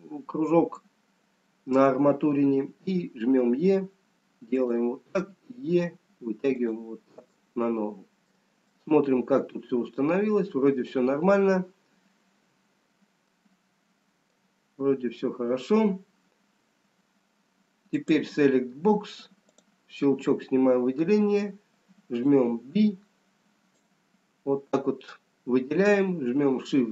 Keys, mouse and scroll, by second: 2.8 e, 5.7 e, 7.7 middle click, 9.3 middle click, 12.4 scroll down 1, 14.4 middle click, 14.4-18.7 scroll down 1, 18.7 click, 19.9 click, 21.7 b.